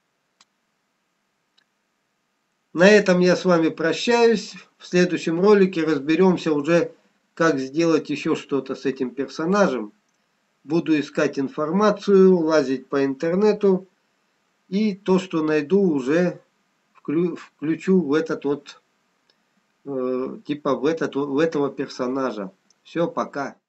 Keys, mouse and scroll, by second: 7.5 middle click.